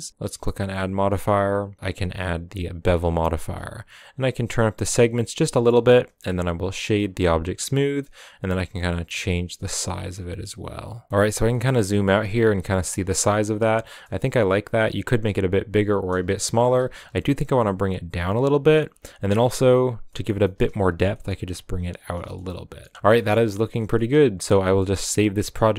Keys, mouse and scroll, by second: 2.5-5.4 drag, 5.4-6.9 middle drag, 6.9 w, 7.9-9.6 shift+drag, 10.0-11.1 shift+drag, 11.1-11.6 middle drag, 11.6-12.4 scroll down 3, 11.8 middle click, 12.4-12.9 middle drag, 12.9 scroll up 6, 13.3 right click, 13.8 right click, 14.2 s, 16.2 scroll down 2, 16.4 middle click, 16.6 g, 18.4-18.8 middle drag, 18.8 scroll up 6, 19.3 g, 20.1 middle click, 20.3 scroll up 1, 20.4 shift+middle click, 20.7 g, 22.2 scroll down 4, 22.3 a, 22.3-25.7 middle drag.